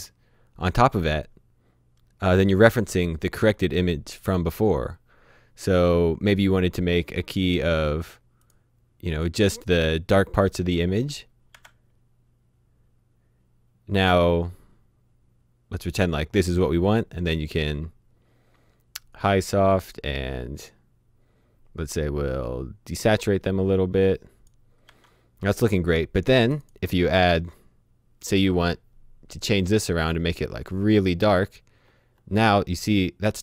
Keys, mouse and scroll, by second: 5.6 s, 5.7 click, 8.4 click, 10.7 click, 11.5 h, 18.9 h, 19.0 click, 23.1 click, 24.9 h, 26.4 click, 29.4-33.3 scroll down 1.